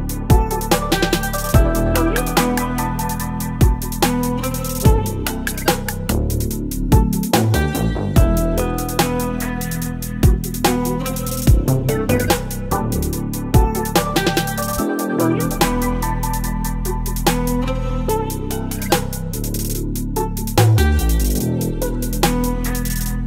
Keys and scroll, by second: 20.5 ctrl+BackSpace, 21.5 ctrl+d, 21.9 space.